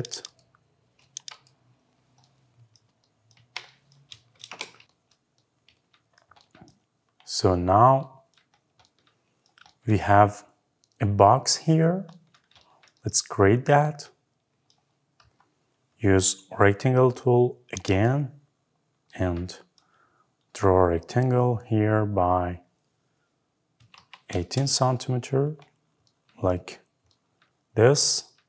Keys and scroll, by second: 0.8 Escape, 3.1 Delete, 4.1 Escape, 24.2 Return.